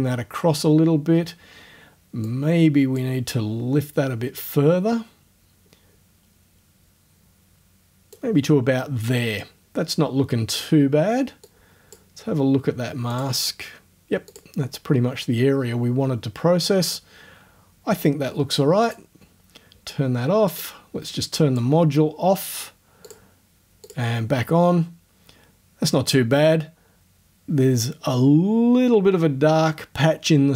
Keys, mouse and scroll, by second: 2.3 click, 4.4-8.3 drag, 8.3-10.7 middle drag, 11.5 click, 12.1-13.1 middle drag, 13.1 click, 13.4 middle click, 14.3 click, 14.6-17.4 middle drag, 18.9 click, 20.6-21.8 drag, 21.8-23.1 middle drag, 23.1 click, 23.3 middle click, 23.9 click, 24.1-27.4 middle drag.